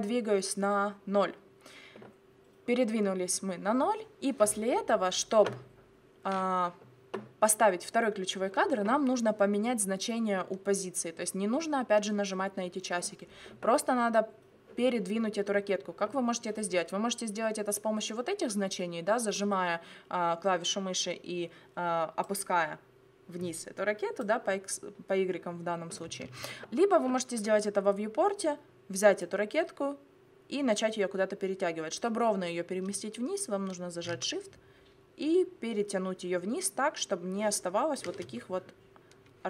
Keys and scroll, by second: 26.3 ctrl+z.